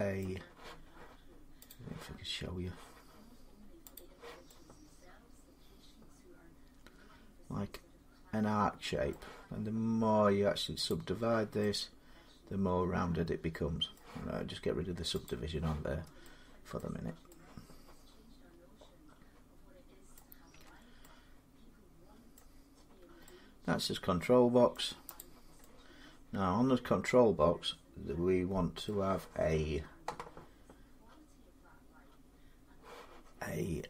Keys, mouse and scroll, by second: 1.7 click, 3.7 click, 8.8 middle click, 10.7 click, 13.7 middle click, 13.8 scroll up 1, 15.0 click, 15.7 scroll down 2, 15.8 scroll up 1, 16.6 middle click, 16.7 Tab, 19.9 middle click, 20.3 Tab, 22.1 middle click, 24.5 middle click, 25.0 click, 28.6 middle click, 30.0-33.7 middle drag.